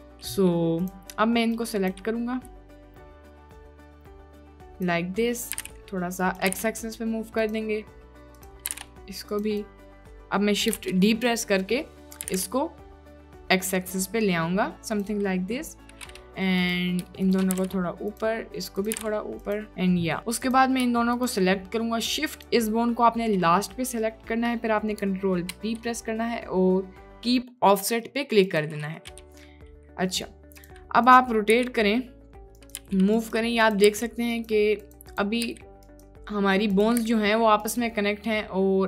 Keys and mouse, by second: 0.8 click, 1.6 click, 3.0 g, 3.5 g, 4.0 g, 4.6 click, 5.5 g, 6.5 g, 8.8 g, 9.7 click, 10.8 shift+d, 12.2 g, 16.6 click, 17.3 shift+click, 17.6 g, 18.7 click, 19.0 g, 20.4 click, 25.5 ctrl+p, 30.7-31.2 drag, 31.6 r, 32.8 g, 33.7 click, 34.0 r, 34.9 click, 35.5 r, 36.8 click, 37.1 r.